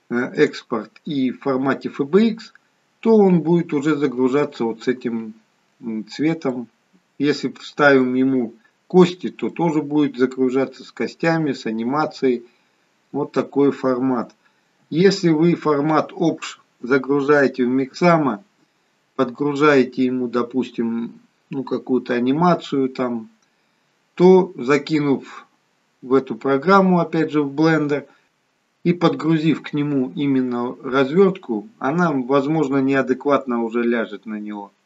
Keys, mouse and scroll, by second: 6.4 middle click, 9.4 middle click, 14.7 KP_1.